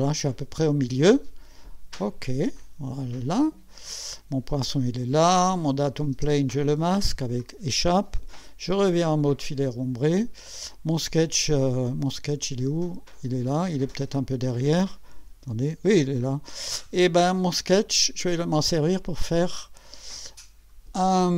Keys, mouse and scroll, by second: 2.2 click, 3.5-4.6 drag, 5.8 click, 6.1 space, 6.8 scroll down 2, 7.4 click, 9.4-10.3 drag, 10.5-11.2 drag, 12.1 scroll down 1, 13.1 click, 13.8 click, 19.2 click.